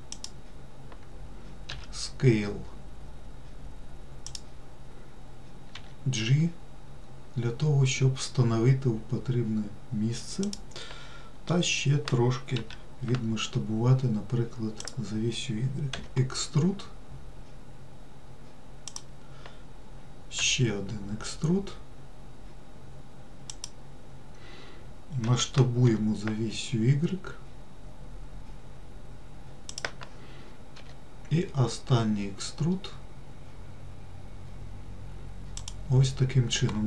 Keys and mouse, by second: 2.0 s, 6.1 g, 12.9 s, 16.3 e, 20.7 e, 25.6 s, 31.1 e.